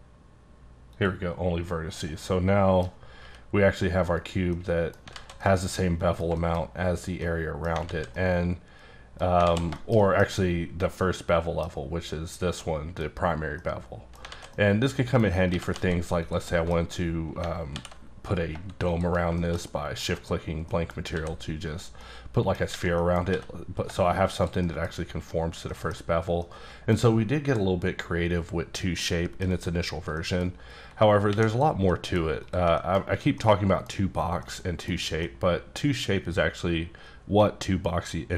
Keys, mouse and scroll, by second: 0.9 click, 2.2 middle click, 2.9-3.2 scroll down 2, 3.2 g, 4.1 right click, 4.5 middle click, 5.1 alt+z, 5.4 middle click, 6.6-7.2 scroll up 2, 7.2 middle click, 7.6 scroll down 1, 7.8 alt+z, 8.1 middle click, 9.4 alt+z, 9.8 shift+middle click, 10.0 double middle click, 10.2-10.9 scroll down 1, 10.9 middle click, 12.6 middle click, 13.3 scroll down 1, 13.6 middle click, 14.3 alt+z, 14.5 middle click, 15.3 scroll down 2, 15.5 g, 15.7 z, 16.5 middle click, 16.8-17.4 scroll up 1, 17.7 alt+m, 18.9 shift+click, 19.6 middle click, 20.6 middle click, 20.9 scroll down 1, 21.1 s, 22.0 middle click, 23.0 middle click, 23.3 s, 24.3 click, 24.6 middle click, 25.7 middle click, 26.4 middle click, 28.9 scroll down 1, 29.0 middle click, 30.2 middle click, 30.4-31.1 scroll down 1, 31.3 x, 31.5 click, 31.9 middle click, 32.4 click, 32.8 shift+middle click, 34.1-34.4 scroll down 1, 34.4 middle click, 34.9 scroll down 1, 35.2 middle click.